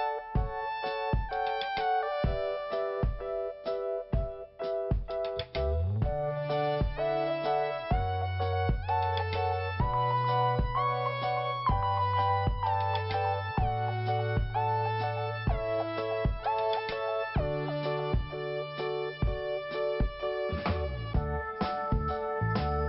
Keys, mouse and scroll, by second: 4.7 scroll up 1, 5.8 click, 6.8 click, 6.9 click, 10.9 click, 15.0 click, 18.7 click, 18.9 click, 20.3 click.